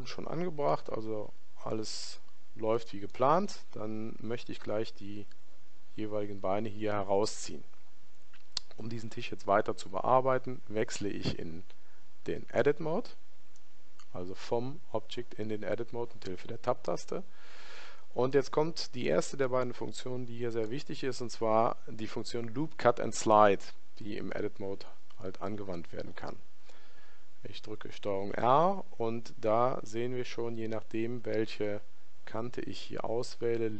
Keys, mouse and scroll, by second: 17.2-21.5 middle drag.